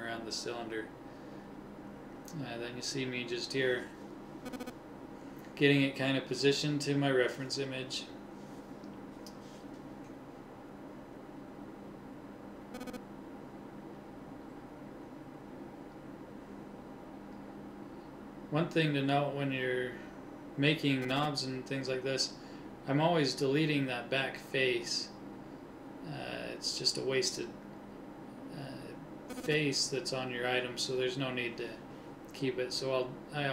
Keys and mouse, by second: 1.0 g, 3.4 g, 7.0 s, 15.3 middle click, 15.8 g, 19.4 r, 22.9 r, 26.1 s.